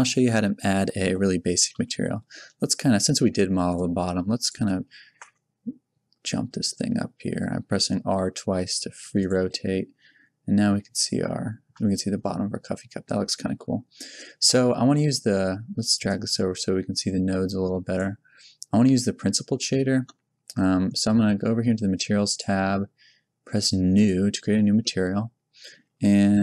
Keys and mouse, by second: 1.7 KP_1, 3.7 click, 3.9 click, 5.1 r, 13.8-16.0 middle drag, 16.0 click, 16.4-17.4 drag, 22.2-24.3 drag, 24.9 click, 25.8-26.4 middle drag.